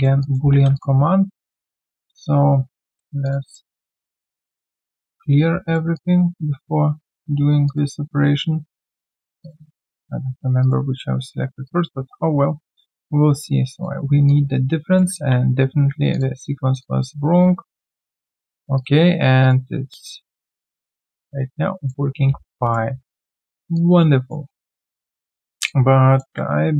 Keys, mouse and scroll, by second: 0.2 alt+click, 0.7 shift+click, 7.6 shift+click, 9.4 shift+click, 14.2 alt+click, 15.2 ctrl+z, 15.4 ctrl+z, 16.8 shift+click, 20.5 alt+right click, 20.7 alt+click, 22.1 alt+scroll down 1, 22.2 q, 22.4 right click, 22.9 alt+scroll down 1, 23.1 alt+click, 23.5 alt+right click, 23.7 alt+click, 24.4 alt+middle click, 24.7 alt+right click, 25.6 alt+click, 26.5 ctrl+z.